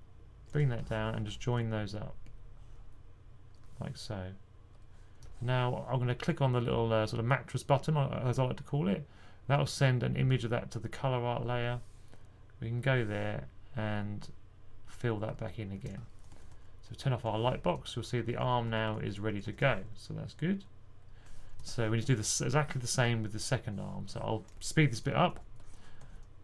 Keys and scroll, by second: 16.4 typing, 17.9-20.0 typing.